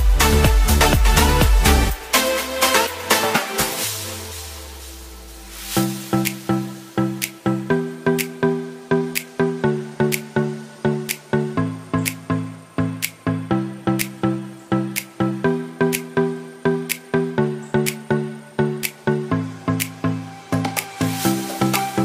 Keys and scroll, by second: 5.1 ctrl+t.